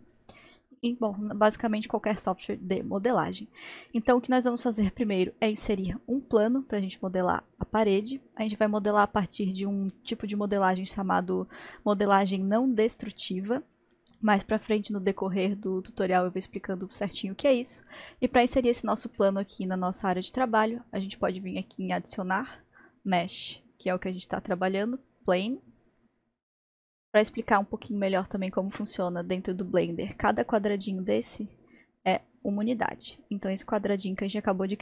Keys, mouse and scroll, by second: 2.1-5.1 middle drag, 19.2-21.8 middle drag, 21.8-24.9 drag, 27.5-34.8 drag.